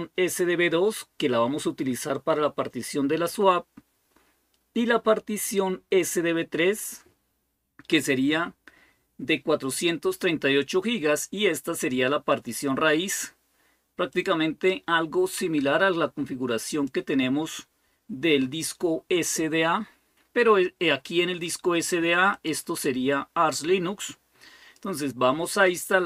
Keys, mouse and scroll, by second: 13.9-21.2 drag, 22.1 click, 22.7-24.8 drag.